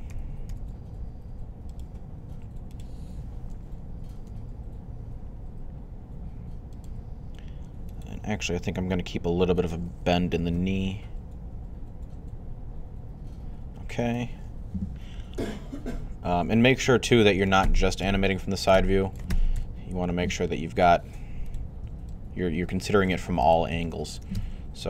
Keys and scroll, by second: 0.0-0.8 typing, 3.7-4.6 typing, 10.4 typing, 19.2-19.9 typing, 24.7 typing.